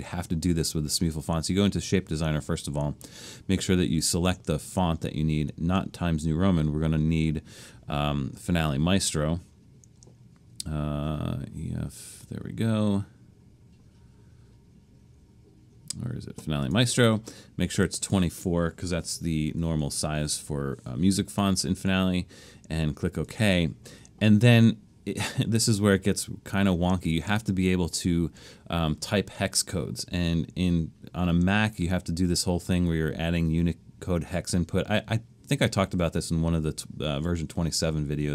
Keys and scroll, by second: 19.2-20.1 typing.